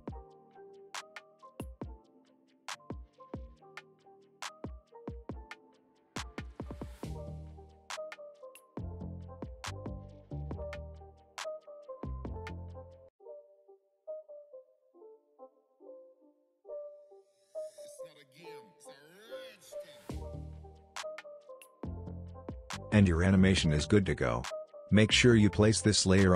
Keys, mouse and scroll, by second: 7.4-8.2 scroll down 1, 8.2-8.6 scroll up 1, 8.6-9.1 scroll down 1, 9.1 click, 9.5 space, 11.6 space, 12.3-13.4 drag, 18.5 n, 19.2 click, 19.4 space, 21.3 space, 23.5 click, 24.8 space.